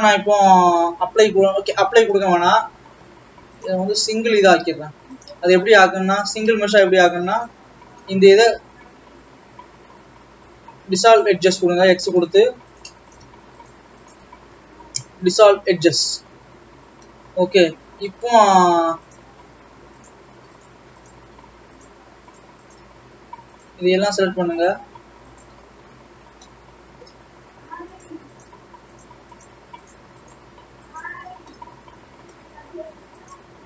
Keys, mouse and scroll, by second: 1.9 middle click, 2.7-3.8 scroll up 1, 3.8 click, 4.8-5.3 scroll down 1, 5.3 click, 6.2 click, 7.1 shift+click, 8.2 shift+click, 8.6 x, 12.0-13.3 middle drag, 13.3 click, 13.7 shift+click, 14.3 shift+click, 15.1 x, 16.6-19.1 middle drag, 19.1 click, 20.7 shift+click, 21.1 shift+click, 22.0 shift+click, 22.4 shift+click, 22.7 shift+click, 23.2-24.1 scroll down 2, 24.1 shift+click, 24.8 shift+click, 25.4 shift+click, 26.1-27.4 shift+scroll up 1, 27.8 middle click, 29.1 shift+click, 30.2 shift+click, 31.0 shift+click, 32.1-33.2 middle drag, 33.2 shift+click.